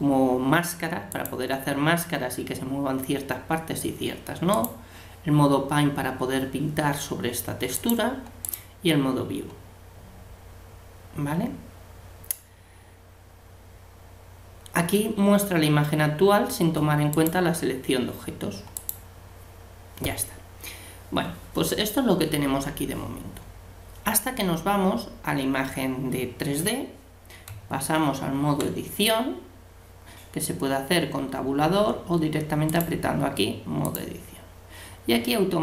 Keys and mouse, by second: 1.1-2.9 drag, 7.7-9.5 drag, 17.1-20.5 drag, 27.5 Tab, 32.7-34.4 drag.